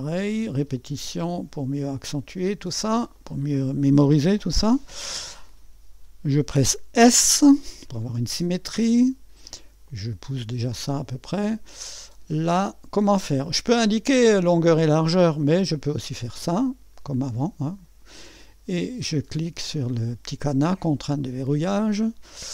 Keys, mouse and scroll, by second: 1.5 click, 3.1 click, 7.1 s, 9.9-11.3 drag, 16.3 click, 17.6 click, 21.2 click, 22.0-22.5 drag.